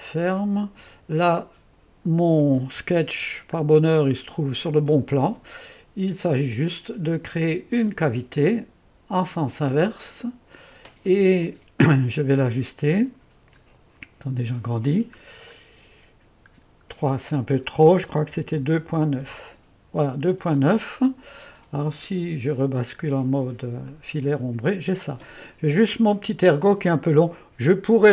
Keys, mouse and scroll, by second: 0.1 click, 1.1 click, 2.9 1, 4.2-7.5 drag, 7.8-9.2 drag, 9.8-12.9 drag, 12.9-14.0 scroll down 1, 14.0-15.6 scroll up 1, 15.7-18.1 scroll up 2, 18.1-19.4 typing, 22.8-23.4 scroll down 2, 23.4 scroll down 1, 23.4 2, 24.0-26.4 drag.